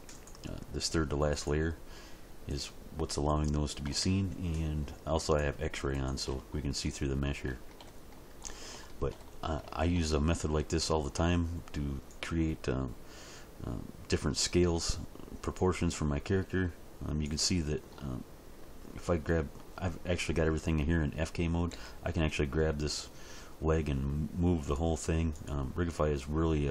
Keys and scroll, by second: 14.5 s, 21.7 g, 26.1 g.